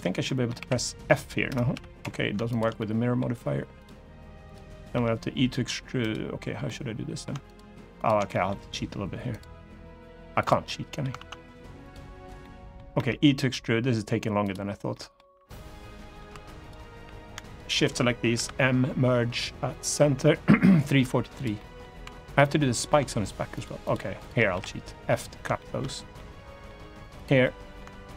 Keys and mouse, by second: 0.0 middle click, 0.3 f, 1.5 f, 1.7 Escape, 2.2 shift+click, 2.5 middle click, 3.5 click, 4.2 click, 4.7 e, 5.7 right click, 6.4 middle click, 7.7 shift+click, 8.0 middle click, 10.4 middle click, 10.9 ctrl+z, 11.6 click, 12.1 middle click, 12.7 e, 14.1 click, 14.6 middle click, 15.2 middle click, 17.0 shift+1, 17.2 shift+click, 18.1 m, 21.3 middle click, 22.3 middle click, 22.3 2, 23.3 shift+click, 24.2 f, 24.8 middle click, 25.3 shift+middle click, 25.9 middle click, 26.9 click, 27.1 middle click, 27.9 shift+click.